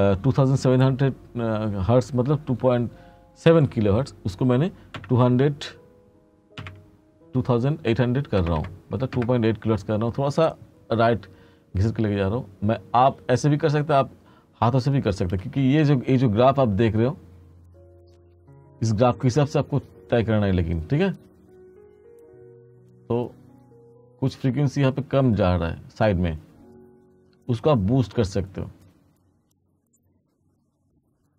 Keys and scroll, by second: 5.0 2, 6.7 8, 8.6 0, 9.2 Return, 15.5 space, 16.6 space.